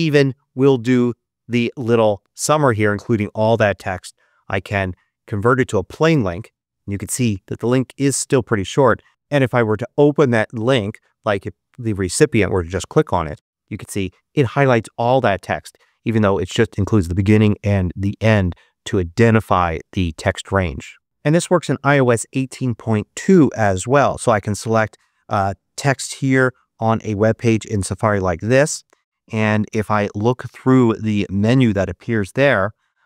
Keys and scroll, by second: 13.3 Return.